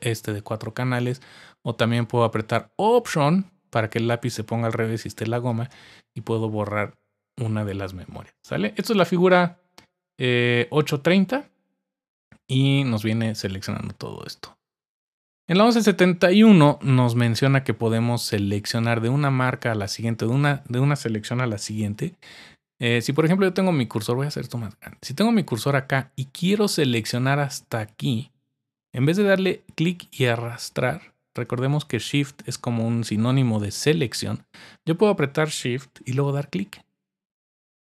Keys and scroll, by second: 21.5-21.9 typing.